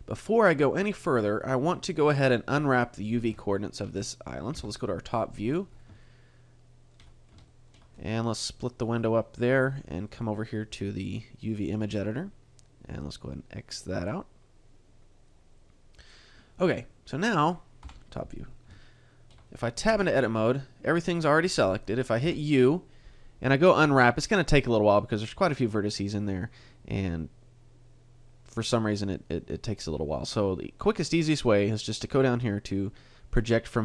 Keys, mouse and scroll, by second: 0.1 middle click, 3.5 shift+middle click, 4.6 KP_7, 5.4-6.0 scroll down 6, 6.0 shift+middle click, 7.1 scroll up 1, 7.5 shift+middle click, 8.8 click, 10.1 click, 13.0 middle click, 13.9 click, 15.3 click, 16.8 middle click, 17.9 KP_7, 19.4 shift+middle click, 19.4-20.0 scroll up 2, 20.0 Tab, 22.2 u.